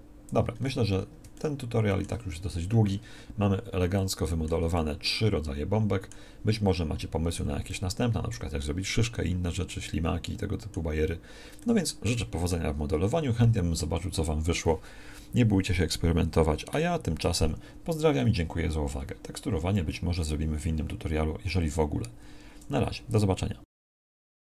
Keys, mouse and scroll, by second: 0.1-1.1 drag, 10.5-12.6 drag, 12.6 KP_1.